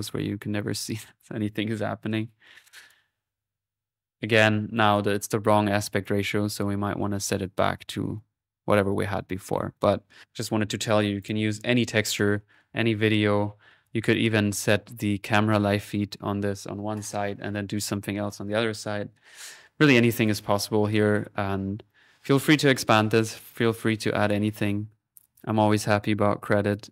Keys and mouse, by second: 2.2 middle click, 2.7 click, 4.8 click, 5.9 click, 6.5 middle click, 7.2 click, 9.1 middle click, 9.8 click, 11.2-12.4 drag, 12.6 click, 13.3 middle click, 13.7 click, 20.1 click, 20.6-21.6 middle drag, 22.7 click, 26.6 click.